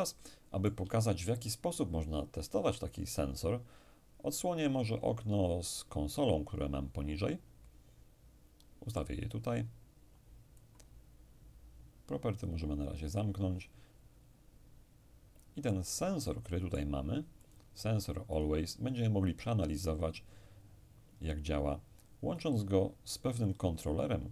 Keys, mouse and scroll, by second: 5.7-11.5 drag, 12.5 click, 14.1-14.8 scroll up 1, 14.8-15.5 scroll up 1, 15.5-16.2 scroll up 1, 16.2-19.4 middle drag, 17.4 click, 23.4 click.